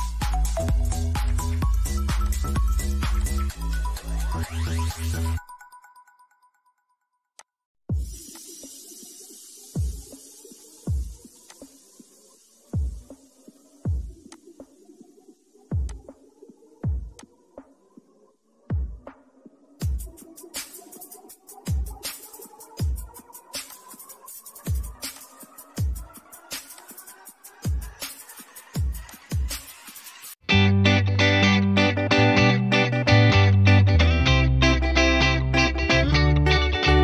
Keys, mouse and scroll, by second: 4.4 space, 6.9 click, 11.0 click, 13.9 click, 17.7 space, 23.2 click, 25.8-26.3 scroll down 1, 26.3 click, 26.7-28.0 scroll down 1, 28.6 click, 34.0-34.5 scroll down 1, 35.5 middle click, 36.2-36.8 scroll down 1.